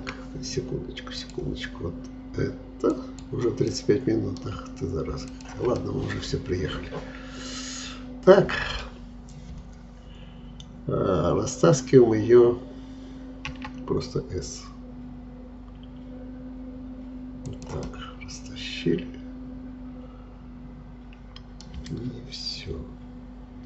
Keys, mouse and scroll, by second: 3.7-5.3 middle drag, 5.3 shift+click, 5.8-8.8 middle drag, 13.5 s, 17.8-20.9 middle drag.